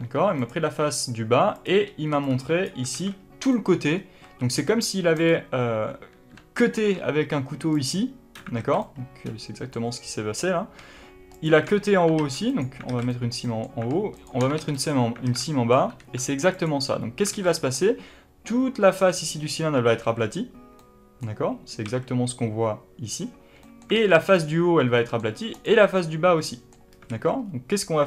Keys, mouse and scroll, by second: 0.3 click, 1.4 click, 2.0 b, 2.8 alt+a, 3.4-5.1 middle drag, 4.1 a, 5.1 click, 6.6 ctrl+e, 8.5 alt+a, 8.7-11.2 middle drag, 11.2 alt+shift+click, 12.1 ctrl+e, 12.8 alt+a, 13.0-14.1 middle drag, 14.1 alt+shift+click, 14.5 ctrl+e, 15.1 alt+a, 15.3-16.4 middle drag, 15.9 3, 16.4 click, 17.2 alt+a, 17.4-24.2 middle drag, 21.7 a, 23.9 alt+a, 24.2 click, 24.9 middle click, 25.4 click, 25.9-27.0 middle drag, 27.0 alt+a, 27.3-28.0 scroll up 2.